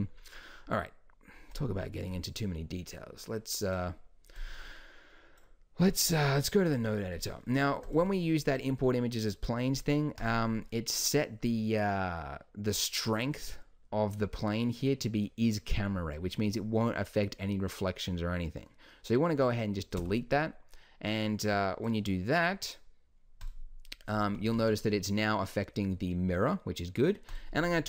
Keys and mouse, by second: 1.5-6.1 drag, 6.1 n, 7.9 click, 8.0 g, 11.5-13.5 drag, 20.0 x, 21.9-23.6 drag, 24.9 click, 27.3-27.8 drag.